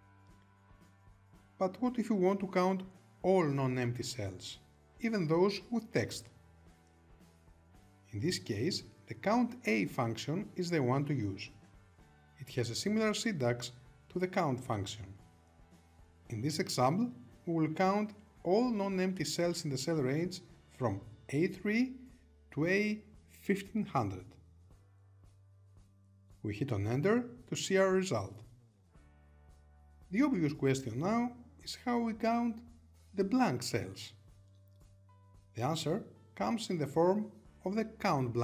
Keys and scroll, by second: 28.3 Return.